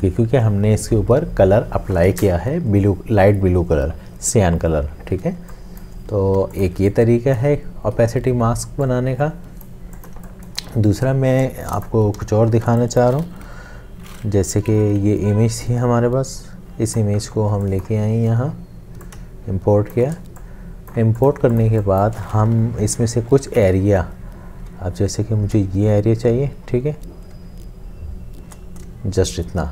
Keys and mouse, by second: 5.4 space, 6.4 space, 6.9 space, 7.3 click, 10.2 space, 12.2 Delete, 12.7 space, 14.7 alt+Tab, 19.1 alt+click, 21.5 space, 23.1 l, 24.7 click.